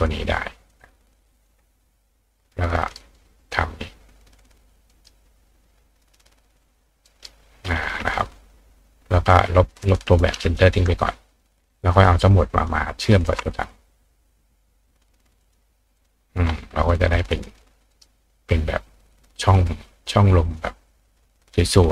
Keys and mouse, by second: 0.7 click, 1.5-2.9 ctrl+drag, 2.7 ctrl+right click, 3.8-5.0 ctrl+drag, 4.9-6.3 ctrl+right drag, 6.3 ctrl+click, 7.0-8.0 ctrl+right drag, 9.8 click, 12.0 click, 13.1 shift+click, 15.4 click, 16.0 click, 17.0 click, 17.4 click, 17.9 right click, 20.0 click, 20.6-21.9 drag.